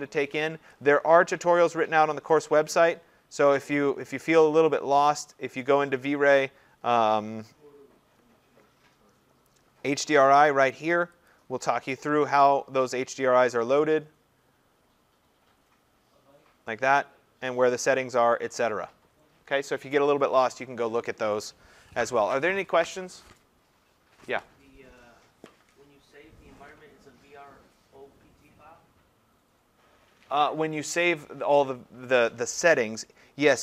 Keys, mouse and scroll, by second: 2.6-6.3 drag, 6.3 middle click, 6.4-7.1 scroll, 7.5-8.1 scroll, 9.3-9.6 scroll, 11.3 click, 13.2-17.6 scroll, 17.6-18.6 scroll down 13, 18.6-20.7 scroll up 34, 20.7-21.2 scroll.